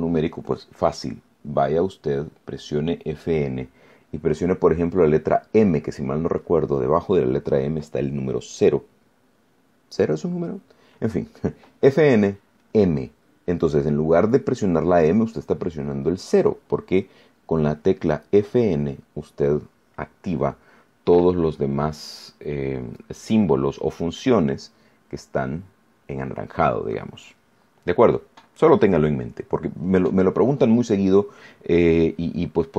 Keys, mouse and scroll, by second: 27.7 scroll down 2, 28.3 scroll up 2, 29.2 scroll down 2, 29.8 scroll up 2, 30.5 scroll down 2.